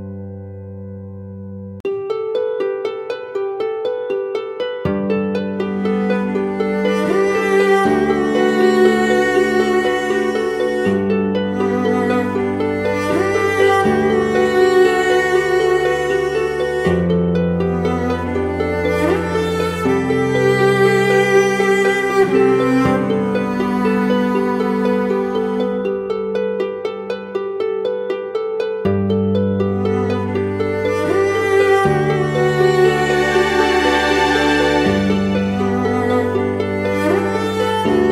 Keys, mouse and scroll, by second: 0.1 Return, 0.2 ctrl+t, 1.2 alt+shift+click, 6.0 Return, 6.9 Right, 7.6 Right, 8.1 Left, 12.8-14.1 typing, 14.5 double click, 18.3 ctrl+t, 29.0 Return, 35.5 right click.